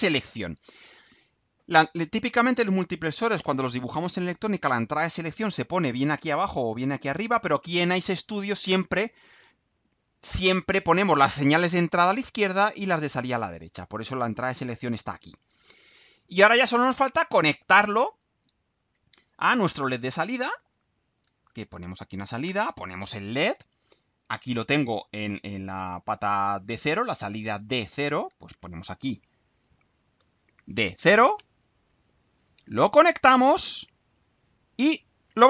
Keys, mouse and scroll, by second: 15.9 right click, 16.6 scroll down 1, 17.0-18.4 right drag, 20.1 click, 21.4-22.4 typing, 22.4 shift+Return, 24.2 click, 27.3 click, 28.5 shift+s, 30.1 BackSpace, 30.5 shift+d, 31.3 0, 31.9 click, 33.1-34.2 drag.